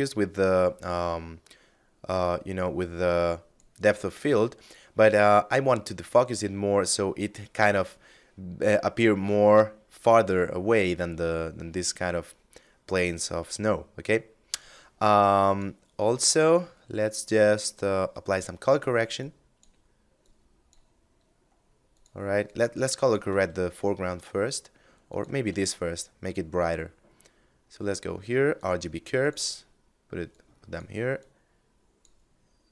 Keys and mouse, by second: 1.3 click, 13.8 click, 17.6 click, 22.7 shift+a, 24.2 click, 24.7 shift+a, 27.8 click, 32.6 click.